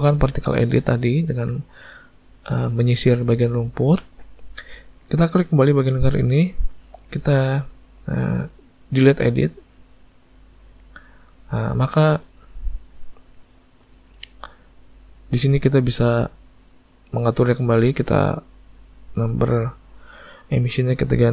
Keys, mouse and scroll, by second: 6.1 click, 9.4 click, 12.6 middle click, 14.7 click, 19.2 click.